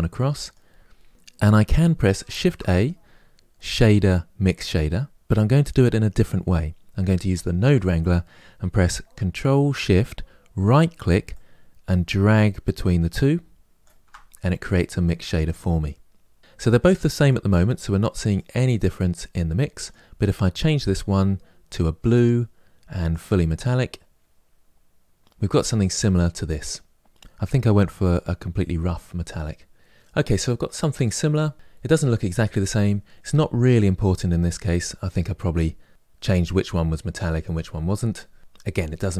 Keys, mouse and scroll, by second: 13.7-15.7 ctrl+shift+right drag, 15.7 click, 18.2-21.6 drag, 23.0-29.8 drag, 29.8-30.2 scroll up 2, 32.1-37.2 scroll up 3.